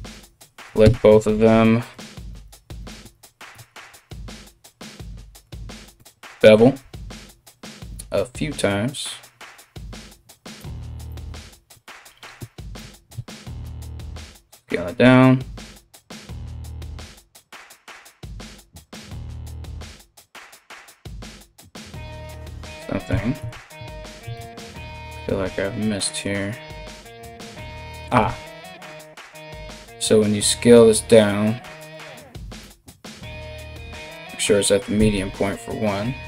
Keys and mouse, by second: 0.4 space, 1.5 ctrl+alt+shift+click, 1.9 ctrl+alt+shift+click, 2.2-3.7 ctrl+alt+shift+middle drag, 3.1 ctrl+z, 3.7 alt+shift+click, 3.7 alt+shift+middle click, 4.5 alt+shift+click, 4.8-36.2 alt+shift+middle drag, 5.5 ctrl+b, 11.3 Tab, 12.0 KP_3, 12.3 Tab, 12.7 a, 13.2 s, 15.8-18.5 typing, 18.6 right click, 18.8 right click, 19.1 right click, 19.3 shift+right click, 19.7 shift+right click, 21.7 alt+right click, 21.9-23.3 ctrl+z, 27.8 a, 28.5 s, 34.5 s.